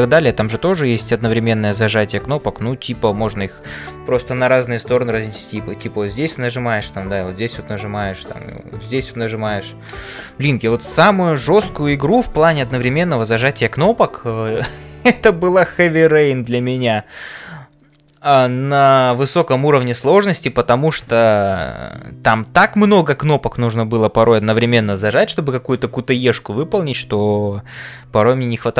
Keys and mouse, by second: 0.0-28.7 typing.